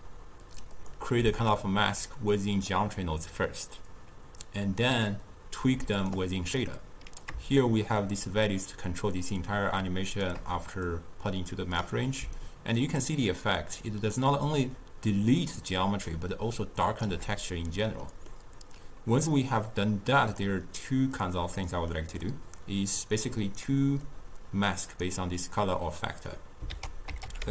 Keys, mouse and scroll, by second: 1.6-10.7 drag, 10.9 click, 12.5-15.6 shift+drag, 18.2-19.9 middle drag, 19.9-21.9 drag, 21.9 middle click, 22.7-26.8 drag, 26.8 ctrl+a.